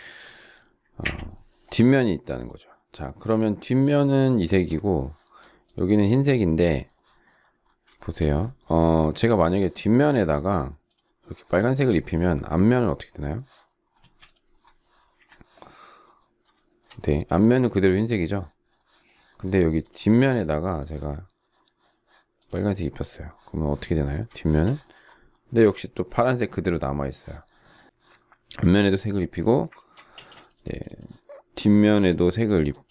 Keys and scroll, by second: 1.0 Delete, 14.0 space, 15.2 Delete, 30.1 ctrl+space.